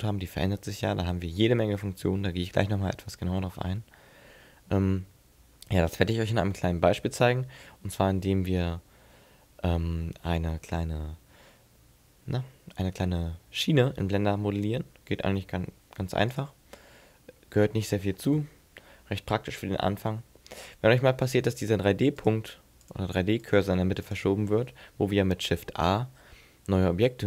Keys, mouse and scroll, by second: 1.5-1.9 scroll up 4, 1.9-3.3 scroll down 6, 14.9 Tab, 16.0 x, 17.4 middle click, 19.1 n, 19.5 n, 22.2 click, 22.9 click, 23.5 click, 24.1 click, 26.0 shift+a.